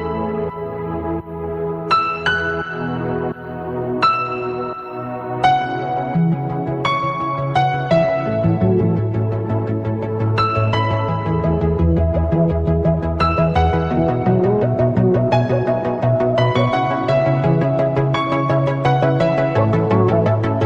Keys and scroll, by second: 0.4 ctrl+alt+shift+e.